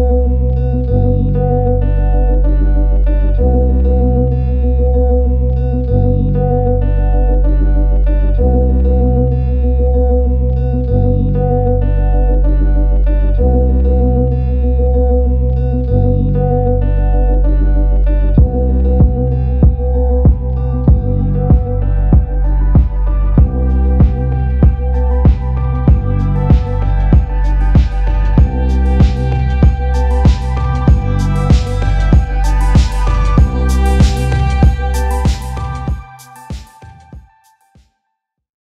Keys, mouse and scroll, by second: 1.4 click, 2.2 click, 4.0 click, 4.2 click, 4.6 click, 5.2 click, 5.4-5.7 scroll, 6.6 click, 7.4 click, 8.1 click, 8.5 click, 11.3 click, 15.8 click, 17.0 click, 17.0 click, 17.9 click, 18.5 click, 19.1 click, 21.2 click, 21.6 click, 22.4 click, 24.5 click, 24.9 click, 26.4 click, 26.9 click, 29.2 click, 29.8 click.